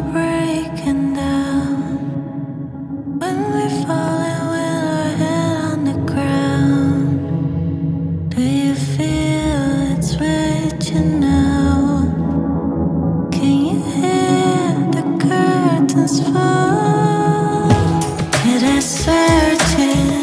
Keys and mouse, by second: 8.0 click, 8.3-9.1 middle drag, 11.1 KP_1, 12.1 shift+z, 13.4 Tab, 13.8 ctrl+r, 16.7 Tab, 16.9 click, 17.3 shift+click, 17.6 shift+d, 17.7 x, 19.8 click, 20.0 ctrl+middle drag.